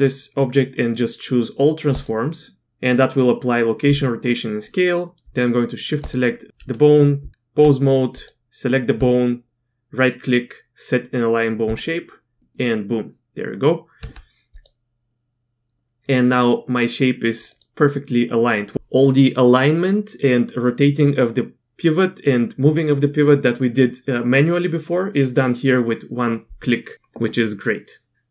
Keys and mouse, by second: 4.5 click, 6.0 shift+click, 7.2 Tab, 8.1 click, 9.1-11.7 drag, 12.4 click, 14.0 Tab, 14.5 click, 16.4-18.3 drag.